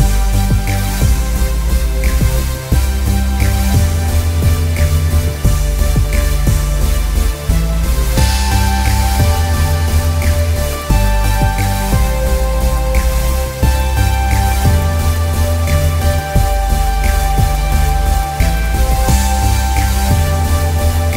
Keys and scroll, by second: 20.9 ctrl+=.